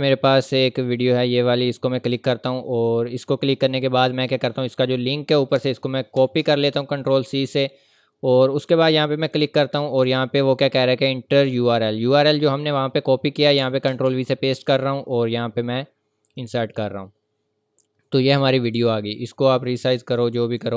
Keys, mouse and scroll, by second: 1.6 click, 7.4 click, 16.3 click, 17.5 scroll down 1, 18.0-18.4 scroll up 1, 18.6 click.